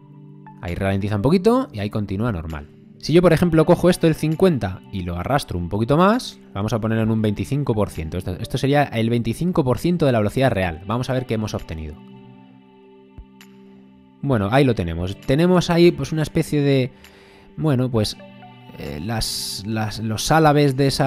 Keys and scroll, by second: 1.7 space, 11.4 space, 17.6 space.